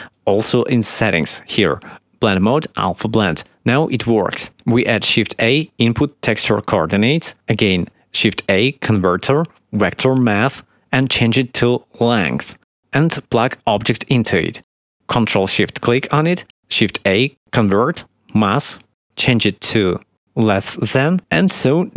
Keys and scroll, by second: 5.4 shift+a, 8.5 shift+a, 17.0 shift+a.